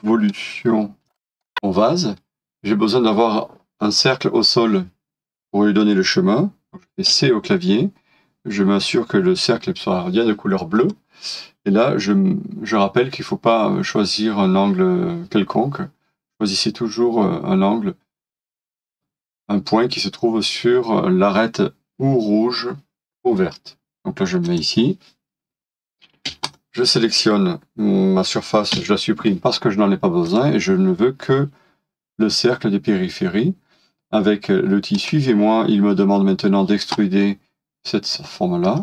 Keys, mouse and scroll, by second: 0.6-1.0 scroll down 1, 1.1 shift+middle click, 1.3 scroll up 1, 7.1 c, 26.1 c.